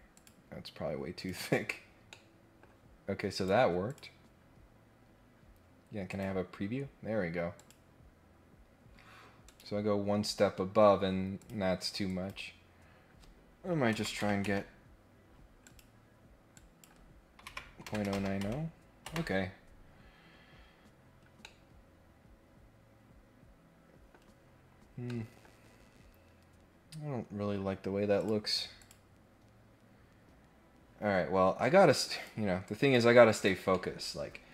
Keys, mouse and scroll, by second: 0.1 click, 1.1 click, 2.1 middle click, 3.3 click, 3.8 click, 6.1 click, 7.5 click, 9.4 click, 11.4 click, 12.0 click, 15.6 click, 16.5 click, 20.6 scroll down 1, 21.0-21.5 scroll up 2, 21.4-24.1 middle drag, 24.1 scroll up 1, 24.3-25.0 scroll down 2, 25.0 middle click, 25.8 scroll up 1, 28.2 click, 28.8 click, 32.0 click, 32.6 click, 33.3 click, 33.7 middle click, 34.1 scroll up 1, 34.2 scroll down 1.